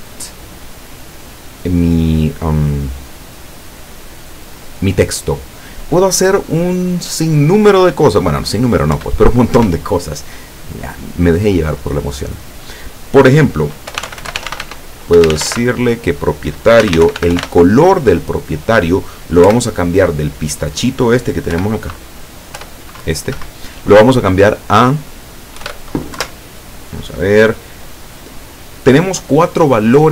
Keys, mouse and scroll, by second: 2.2 click, 9.0 Return, 14.0-15.6 typing, 16.9-17.5 typing, 19.5 =, 21.6 p, 22.6 p, 23.4 Escape, 25.6 [, 26.2 Left.